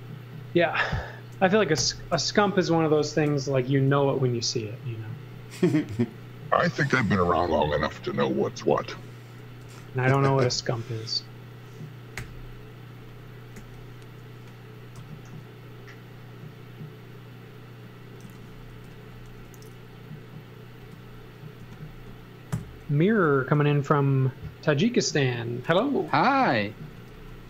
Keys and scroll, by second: 1.8 i, 3.2 Right, 3.7 Left, 9.6 space, 10.6 space, 12.1 g, 13.5 g, 14.9 b, 18.2 z, 18.7 space, 19.3 f, 20.4 f, 20.8 space, 21.6 m, 22.5 Right, 23.1 Left, 24.1 Left, 26.1-27.4 typing.